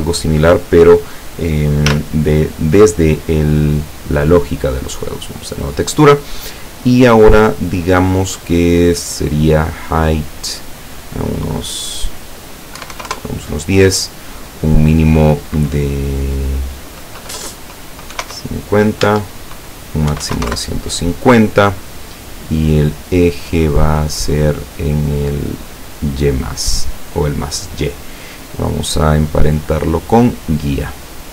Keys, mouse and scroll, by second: 1.9 z, 3.8 click, 4.9 click, 7.1-8.3 drag, 10.4 click, 12.8 KP_1, 13.0 KP_0, 13.1 KP_Enter, 14.7 click, 18.2 KP_5, 19.1 Tab, 20.2 KP_1, 20.3 KP_5, 20.5 KP_Enter, 23.2 click, 26.6 click, 28.7 click, 30.2 click.